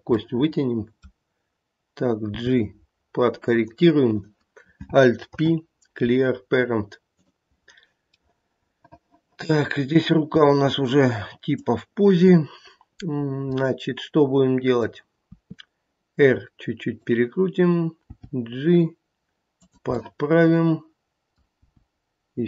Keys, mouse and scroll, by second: 0.1 middle click, 2.3 g, 4.1 click, 5.3 alt+p, 8.1 middle click, 10.2 scroll up 1, 11.0 scroll up 1, 11.5 click, 13.5 middle click, 14.6 middle click, 15.3 r, 18.0 g, 20.0 middle click, 21.6 g.